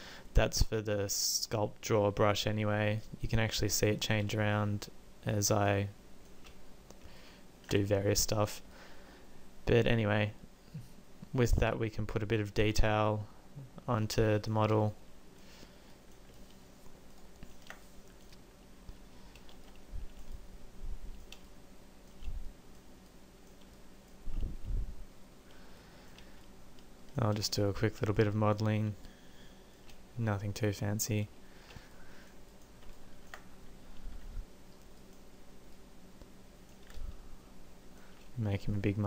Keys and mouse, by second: 2.7 middle click, 34.3 f.